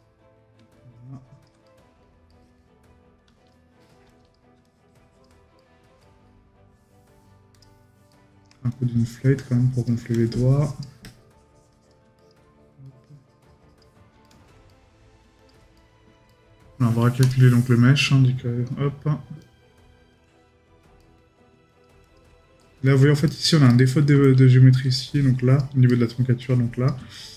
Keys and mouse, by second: 0.0 right click, 1.7 right click, 5.6 right click, 8.1 right click, 14.2 right click, 21.0 right click, 22.6 right click, 25.9 right click.